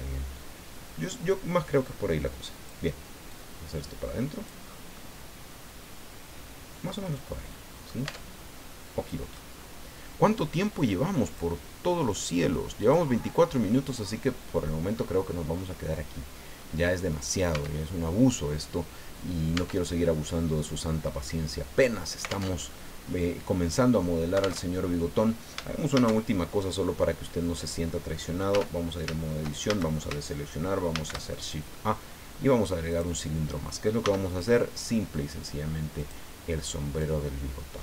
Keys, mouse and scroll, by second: 3.3-4.7 drag, 4.7 scroll down 1, 5.0-8.1 middle drag, 8.1 Tab, 8.3 scroll down 1, 8.7 middle click, 9.5 scroll down 1, 11.3 click, 12.8 click, 13.3-13.7 scroll down 1, 13.7-15.2 middle drag, 15.5-15.9 scroll up 1, 16.1 scroll down 1, 16.6 middle click, 17.5 Tab, 19.5 Tab, 20.2-21.4 drag, 21.9 scroll down 2, 22.4 alt+Tab, 24.6 alt+Tab, 25.9 shift+a, 28.5 Tab, 29.7 shift+a, 30.9 shift+a, 32.9 click, 34.0 s, 36.0 click, 37.0-37.8 drag.